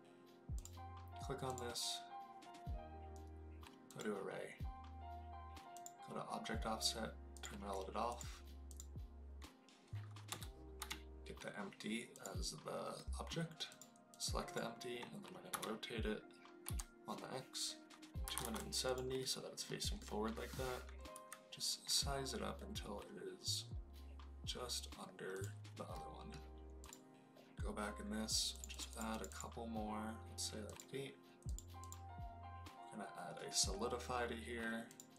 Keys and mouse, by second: 0.5 click, 1.5-3.9 drag, 5.7 click, 7.3 click, 8.0 click, 8.6-12.2 drag, 12.9-13.2 middle drag, 13.6 click, 15.4 r, 16.6 x, 18.2 KP_2, 18.3 KP_7, 18.4 KP_0, 18.8 click, 19.1 middle click, 19.9-20.4 middle drag, 21.1 s, 25.3 click, 25.9 middle click, 26.8 click, 28.6 click, 28.8 click, 29.0 click, 30.7 click, 31.7-34.9 drag.